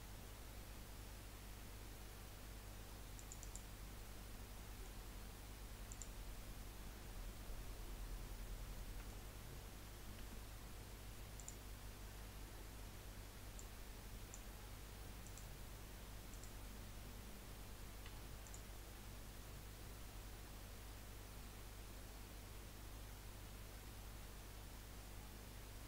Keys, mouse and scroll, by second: 4.5-7.9 middle drag, 7.9 click, 8.9-10.2 middle drag, 10.2 Tab, 11.4 click, 13.5-18.3 drag, 18.4 click, 19.4-20.0 scroll down 2, 20.0-21.1 scroll down 2, 21.1 scroll up 1, 21.8 scroll up 2.